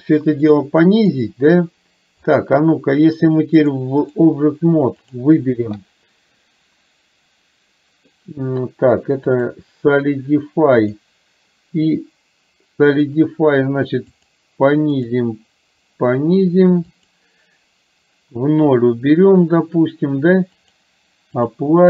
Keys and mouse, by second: 2.5 click, 3.7 click, 5.1 click, 9.5-11.1 drag, 14.2 click, 15.0 click, 17.0 click, 20.6-21.6 drag.